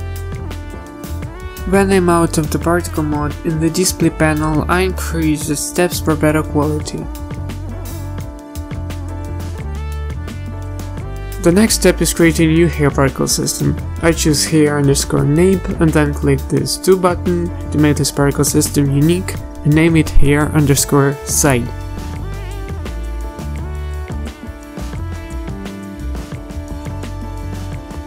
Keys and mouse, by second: 0.0-0.3 typing, 0.1 ctrl+z, 0.6 ctrl+z, 1.5 click, 1.8 z, 2.5 z, 12.3 click, 25.3-28.0 drag.